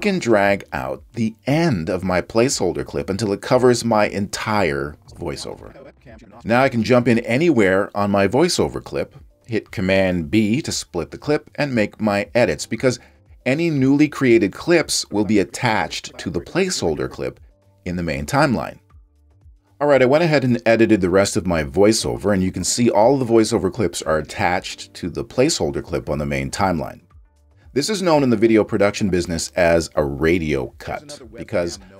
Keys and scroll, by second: 10.7 super+b.